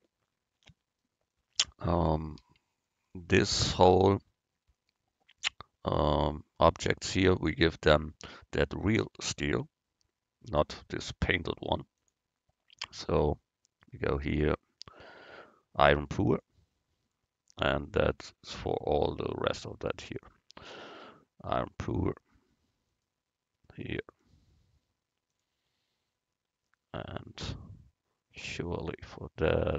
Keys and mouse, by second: 2.3-4.1 right drag, 5.2 middle click, 6.0 middle click, 12.0-15.0 drag, 17.9-23.9 right drag, 20.2-21.9 drag, 24.2-25.9 drag, 24.2-25.9 right drag, 27.1-28.8 middle drag, 28.8-29.7 right drag.